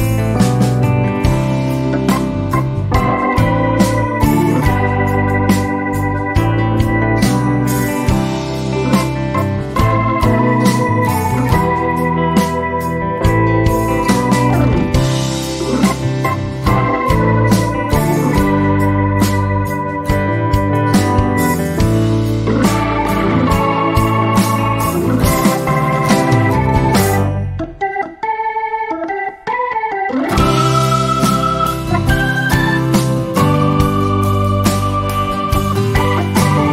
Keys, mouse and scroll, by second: 0.8 shift+click, 2.1 ctrl+z, 2.9 click, 3.8 F1, 4.2 v, 5.3 ctrl+F1, 5.5 ctrl+shift+f, 6.7 click, 6.9 ctrl+a, 7.6 3, 7.7 Return, 8.7 click, 8.9 ctrl+a, 9.2 2, 9.3 Return, 10.3 F12, 11.1 click, 11.3 z, 11.6 click, 11.9 F1, 12.4 click, 12.8 F2, 13.2-13.9 click, 14.2 Down, 14.8 F1, 15.9-16.9 ctrl+drag, 18.1 ctrl+d, 18.8 h, 19.1 click, 19.4 ctrl+scroll down 1, 20.1 click, 20.4 ctrl+d, 20.9 v, 22.1-22.4 ctrl+click, 23.3 ctrl+shift+a, 24.8 click, 25.8 F12, 26.6 ctrl+scroll down 1, 27.0 z, 28.6-29.5 click, 29.4 F1, 29.8-33.9 drag, 36.4 ctrl+a.